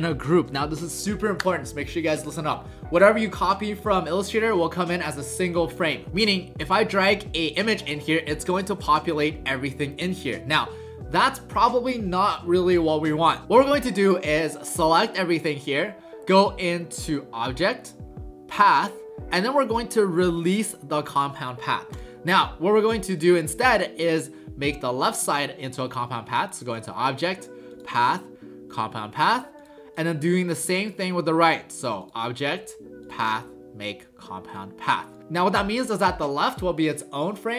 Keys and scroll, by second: 8.6 ctrl+alt+shift+c, 13.4 ctrl+z.